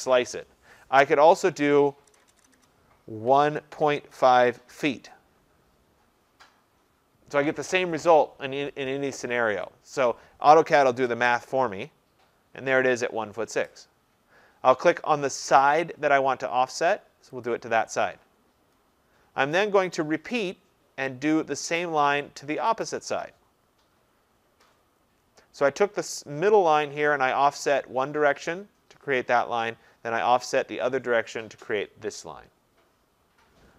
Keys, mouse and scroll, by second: 2.1-4.7 typing, 11.0 Return, 17.5 click, 21.6 click, 22.9 click.